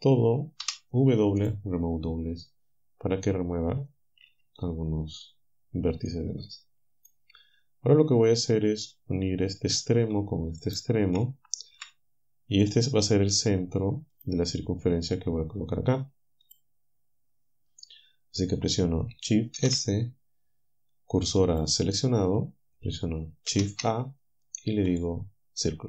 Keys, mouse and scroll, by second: 0.6 w, 1.4 click, 4.3 typing, 6.1-7.3 drag, 8.9 click, 9.8 click, 10.7 shift+right click, 11.8 j, 12.7 right click, 14.2 click, 16.5 click, 19.6 shift+s, 21.5 click, 23.5 shift+a, 24.9 click.